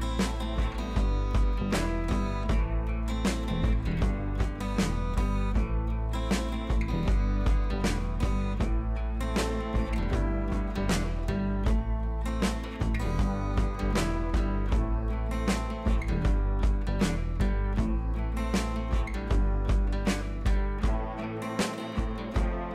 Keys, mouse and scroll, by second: 9.9-11.1 click, 13.2 ctrl+c, 13.4 click, 13.9 ctrl+v, 14.8-19.2 drag, 19.1 Up, 20.4-21.6 drag, 21.9 Down.